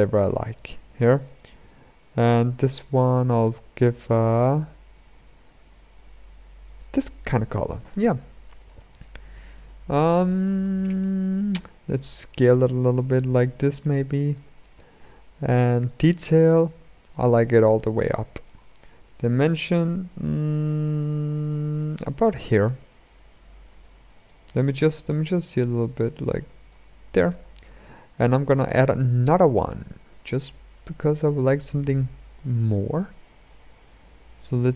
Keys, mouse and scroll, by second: 2.5-3.8 drag, 9.2-9.8 scroll up 3, 9.8-11.7 shift+middle drag, 11.7-13.5 drag, 13.5-14.1 scroll down 2, 14.1-15.6 shift+middle drag, 15.6-17.4 drag, 17.4-18.0 scroll up 2, 18.0-19.2 shift+middle drag, 19.2-21.9 drag, 21.9-22.4 scroll up 1, 22.4-22.9 shift+middle drag, 22.9-23.5 scroll up 1, 23.5-25.2 shift+middle drag, 25.2-26.7 drag, 26.7-27.6 scroll down 6, 27.6-28.6 scroll down 2, 28.6-30.9 drag.